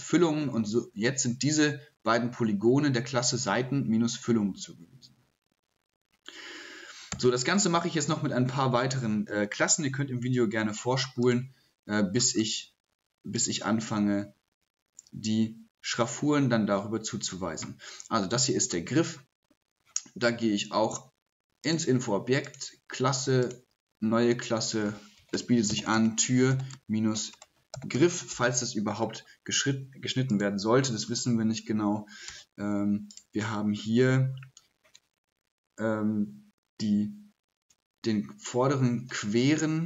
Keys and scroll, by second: 25.4-28.5 typing.